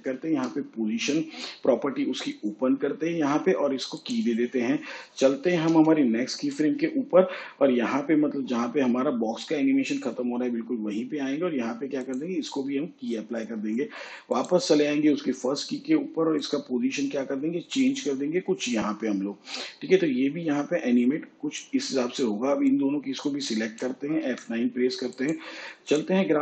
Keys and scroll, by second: 0.3 p, 5.7 k, 24.2 F9.